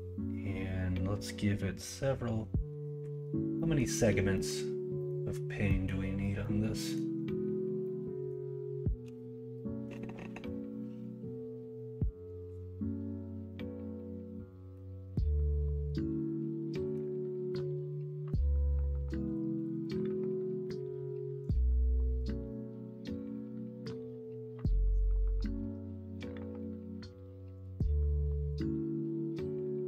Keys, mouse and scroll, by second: 7.8 middle click, 14.7-16.9 middle drag, 22.4-24.9 middle drag, 28.4 middle click.